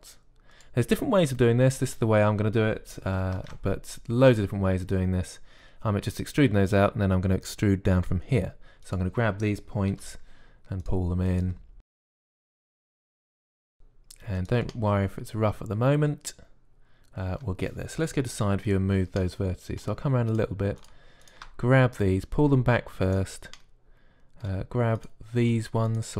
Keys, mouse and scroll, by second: 0.1 e, 4.2 ctrl+Tab, 9.7-11.7 drag, 10.7 g, 11.9-13.8 typing, 19.2 KP_3, 22.8-23.9 middle drag, 23.9 click.